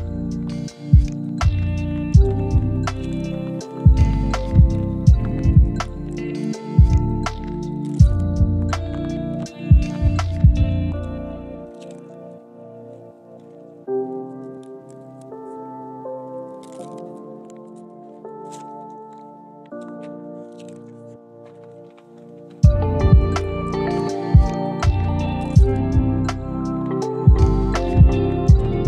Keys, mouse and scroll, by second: 0.9 KP_1, 1.2-1.6 scroll up 3, 1.5 g, 3.1-3.4 middle drag, 4.0 drag, 4.2 shift+click, 4.6 shift+click, 4.8 shift+click, 5.2 middle click, 5.4 middle click, 6.1 shift+middle click, 6.3 middle click, 6.6 shift+click, 7.0 shift+click, 7.6 middle click, 7.9 shift+middle click, 8.3 shift+click, 8.8 middle click, 9.4 KP_1, 9.9 g, 10.9 shift+middle click, 11.4 middle click, 11.8 middle click, 12.2 drag, 12.7-13.0 middle drag, 13.1 KP_1, 13.6 g, 14.2 middle drag, 14.6 shift+middle click, 15.1-16.3 middle drag, 16.6 click, 17.0 middle click, 18.0 shift+click, 19.0 click, 19.6 shift+click, 20.0 shift+click, 20.1 middle click, 21.3-22.6 middle drag, 22.8 KP_3, 23.4-23.7 scroll up 2, 23.7 scroll down 1, 24.0 g, 25.0 middle click, 25.4 scroll down 2, 25.5-27.8 middle drag, 27.9 shift+middle click, 28.1 middle click, 28.4 KP_7, 28.6-28.8 scroll up 4.